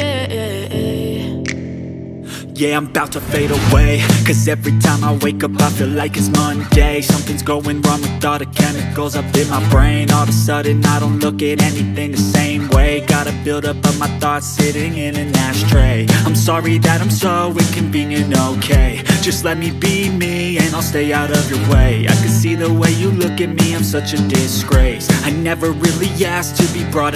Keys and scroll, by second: 3.0-7.8 typing, 14.8-20.9 typing.